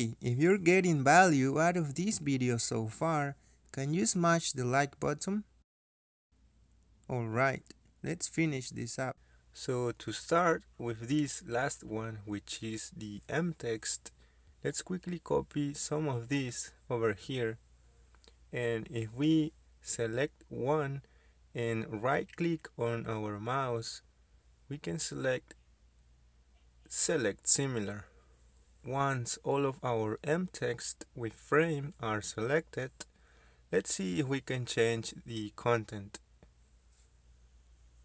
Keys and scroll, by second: 8.6 Escape, 14.3 ctrl+c, 14.5 ctrl+v, 17.6 ctrl+v, 19.5 ctrl+v.